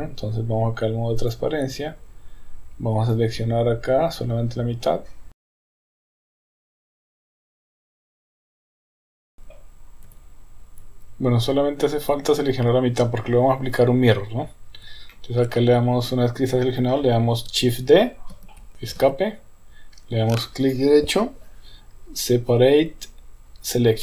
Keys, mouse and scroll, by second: 1.2 click, 3.1-5.4 drag, 5.9 shift+click, 6.1 middle click, 6.6 KP_1, 6.7 KP_3, 6.9 shift+click, 7.2 shift+click, 7.3 shift+click, 7.4 shift+click, 7.6 shift+click, 7.9 middle click, 8.1-10.6 typing, 8.2 shift+middle click, 8.8 shift+click, 12.0 KP_1, 15.1 shift+middle click, 18.4 shift+d, 20.6-24.0 right drag.